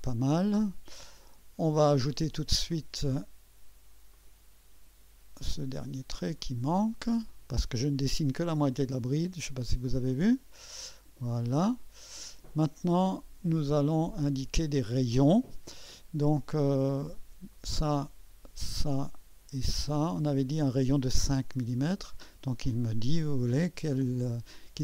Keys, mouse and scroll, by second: 0.0-2.5 drag, 0.0-2.3 middle drag, 0.0-2.3 right drag, 4.1 click, 6.4 click, 10.1-14.7 drag, 17.5 click, 18.7 click, 19.9 click, 21.8 click.